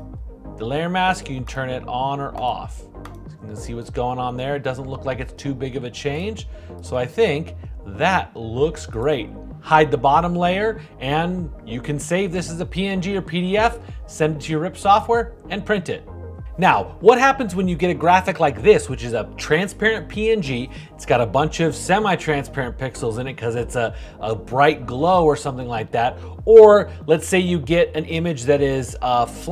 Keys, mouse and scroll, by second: 0.0-1.3 shift+drag.